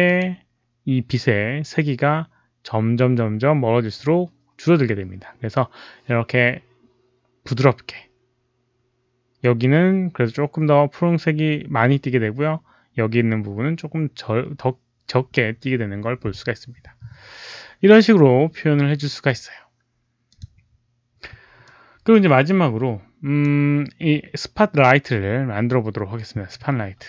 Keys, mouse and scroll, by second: 0.0 click, 20.2 click, 21.6-23.3 drag.